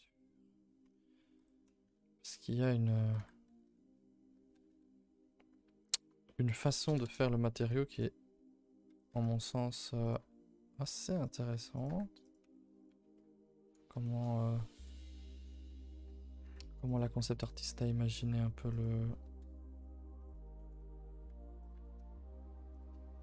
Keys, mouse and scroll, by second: 1.3 r, 3.1 r, 6.2 middle click, 7.0 KP_0, 13.1 middle click, 13.7-15.2 scroll up 11, 14.0 shift+middle click, 14.6 middle click, 15.2 middle click, 15.5 scroll up 1, 15.7 middle click, 16.4 r, 17.0 g, 17.7 r, 18.2 g, 19.4 KP_0.